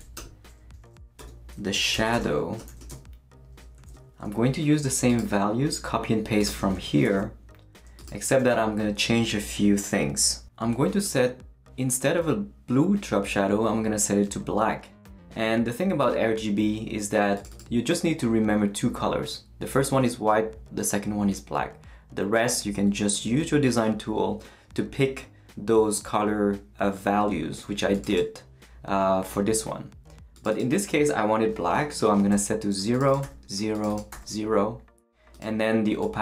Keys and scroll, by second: 0.2 Return, 1.2-3.8 typing, 7.0 shift+super+c, 7.6 super+c, 8.4 super+v, 32.3 0.